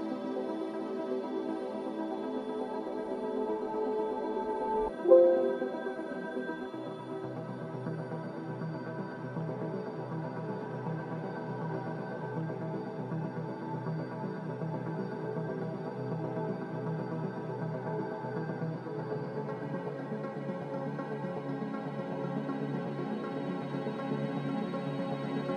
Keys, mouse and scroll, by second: 0.0-1.2 typing, 4.9 z, 7.8-9.7 typing, 11.5-12.3 typing, 15.8 ctrl+z, 17.8-19.1 typing.